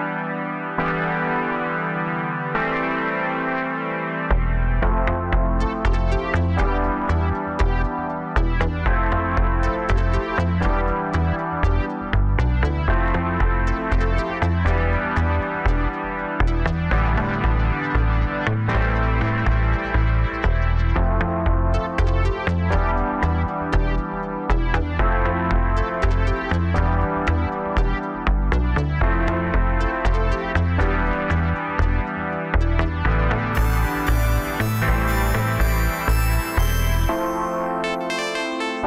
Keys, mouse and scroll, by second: 0.0 Tab, 0.8 click, 1.7 click, 2.4 s, 7.5 click, 8.2 a, 9.1 f, 9.6-10.7 scroll up 1, 11.8 click, 12.7 shift+click, 13.8 j, 14.5 click, 15.5 shift+click, 16.3 j, 17.2 click, 18.3 shift+click, 19.1 j, 20.1 click, 21.1 shift+click, 21.9 j, 22.8 click, 23.7 shift+click, 24.5 j, 25.2 click, 26.0 shift+click, 26.8 j, 27.5 click, 28.4 shift+click, 29.4 j, 30.1 click, 31.5 shift+click, 32.4 j, 33.2-36.3 middle drag, 36.4 KP_7, 38.1 click.